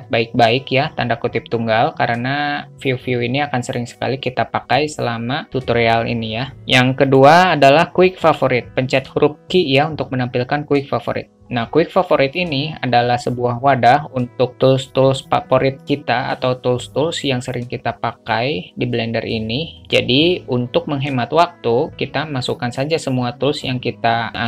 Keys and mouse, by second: 7.4-8.8 drag, 8.8 q.